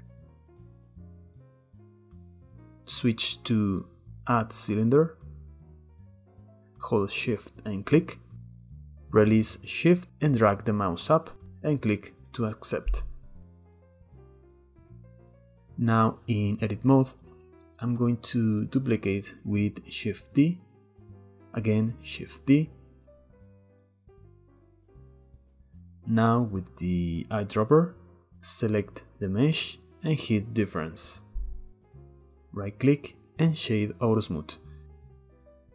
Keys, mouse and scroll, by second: 0.8-2.6 drag, 6.1 click, 11.2-12.3 middle drag, 12.3 click, 12.9-13.5 middle drag, 13.5 click, 14.4 middle click, 14.7 click, 15.1-15.5 middle drag, 15.5-16.0 scroll down 1, 16.0 Tab, 16.8 a, 17.9 shift+d, 18.7 click, 20.3 a, 21.3 shift+d, 22.2 click, 23.7 middle click, 24.0 Tab, 24.8 scroll up 2, 26.5 click, 30.8-31.9 drag, 31.9-32.4 middle drag, 32.4-34.5 right drag, 34.5-35.7 middle drag.